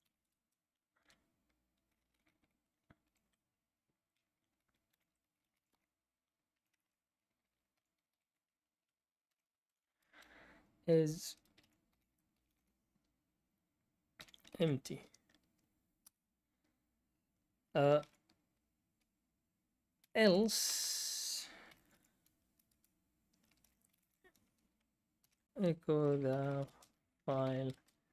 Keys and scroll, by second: 0.0-0.8 typing, 2.7-3.5 typing, 4.6-14.7 typing, 16.0 Return, 18.0 e, 19.7-28.1 typing, 22.7 Return.